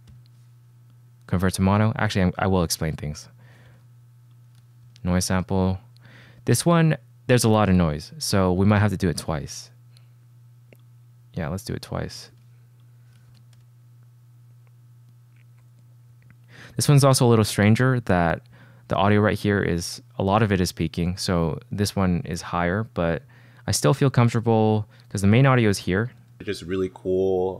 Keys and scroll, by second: 0.2 shift+k, 3.8 shift+p, 5.0 shift+super+p, 5.5 Return, 12.4 shift+p, 13.4 shift+super+p, 13.7 Return, 26.3 space.